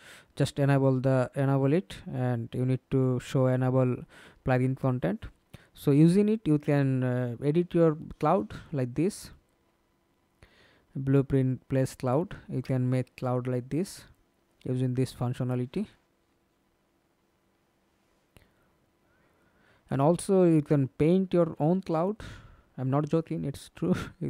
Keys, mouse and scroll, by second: 0.0-0.6 scroll down 3, 0.6-2.5 scroll down 4, 2.5 scroll down 2, 3.3-3.9 scroll down 3, 3.9-5.4 scroll down 3, 18.3-19.0 scroll down 15.